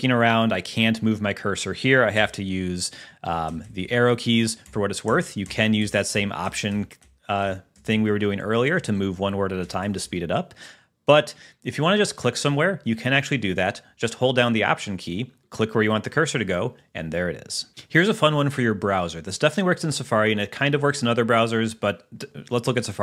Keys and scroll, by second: 2.6 Left, 4.9 alt+Left, 8.0 alt+Right, 9.9 alt+Left.